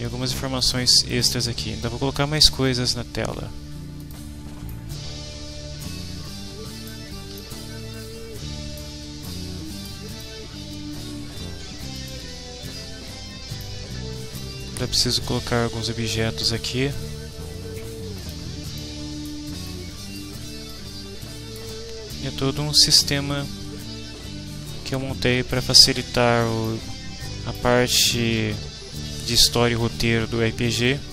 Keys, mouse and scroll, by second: 0.5 click, 1.1 click, 4.0 click, 4.7-7.1 right drag, 7.3-8.9 right drag, 8.1 w, 9.3 right click, 10.1 click, 11.9 click, 13.6 right click, 15.1-16.6 right drag, 18.1 click, 18.8 right click, 19.7 right click, 20.7-21.7 right drag, 22.1-25.7 right drag, 23.8 w, 26.6-27.7 right drag, 28.1-29.5 right drag.